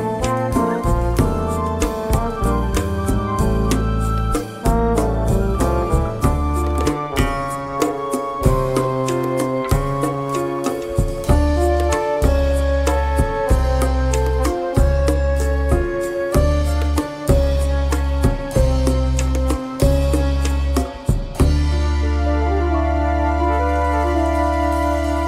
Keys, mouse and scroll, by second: 4.1 click, 6.8 ctrl+d, 10.4 shift+click, 12.0 KP_Add, 12.8-13.1 scroll up 2, 13.6 click, 15.1 shift+click, 16.3 ctrl+KP_Multiply, 17.4 KP_Multiply, 20.1 click, 21.2 KP_Subtract, 23.5 click, 23.8 space, 24.9 KP_Subtract.